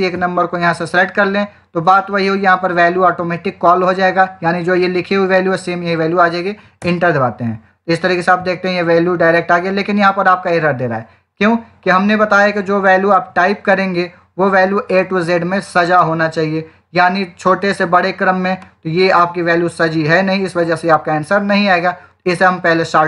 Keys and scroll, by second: 6.7 Return.